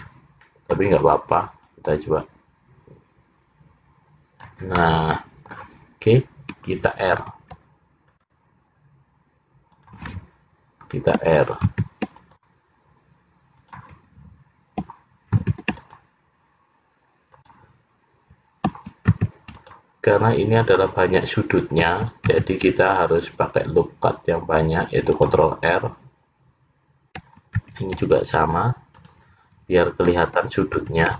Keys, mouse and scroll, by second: 0.0 middle click, 1.7 click, 4.8 middle click, 7.3 ctrl+r, 11.7 ctrl+r, 15.4 ctrl+r, 19.2 ctrl+r, 22.4 ctrl+r, 27.7 ctrl+r.